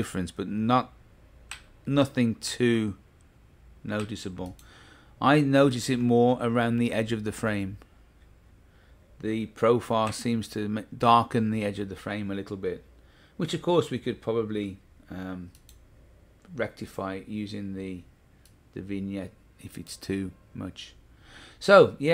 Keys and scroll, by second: 1.5 Left, 2.4 Right, 4.0 Left, 6.0 Right, 10.0 Left.